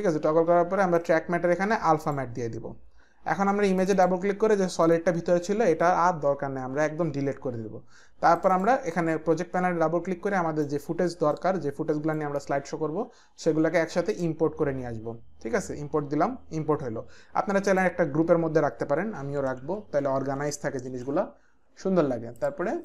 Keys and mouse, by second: 1.0 click, 2.0 click, 3.8 click, 6.7 Delete, 8.4 click, 10.3 click, 11.4 click, 14.1 click, 17.7 click, 19.1-20.7 typing, 20.8 Return, 22.4 click.